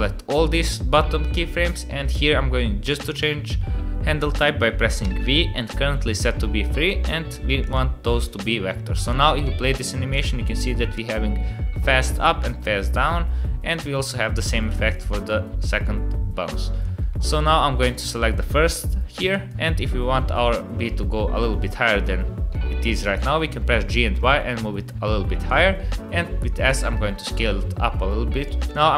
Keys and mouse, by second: 5.0 v, 9.0 click, 9.4 space, 10.1 click, 10.5 space, 10.9-16.8 drag, 17.3 click, 19.3 click, 22.5 g, 25.8 s, 28.4 click, 28.7 click.